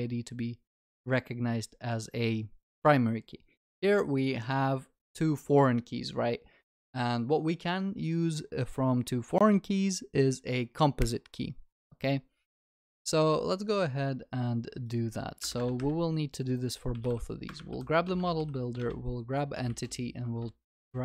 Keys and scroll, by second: 17.5 Return.